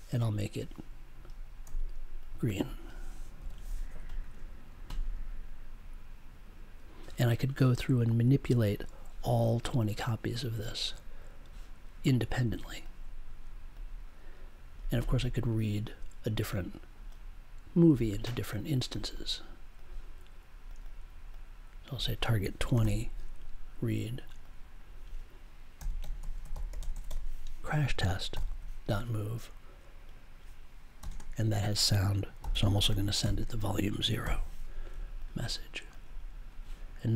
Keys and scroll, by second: 1.6 1, 3.3 0, 22.7 2, 25.7 c, 28.3 super+j, 31.0 ,, 31.0 space, 32.1-33.2 typing, 34.2 super+j.